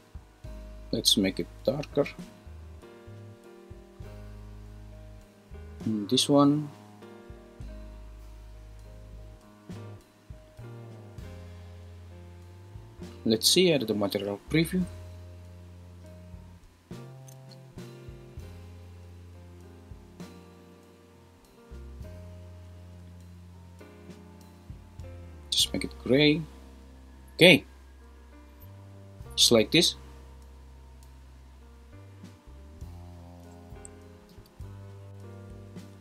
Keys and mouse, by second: 5.9 click, 34.8 super+s.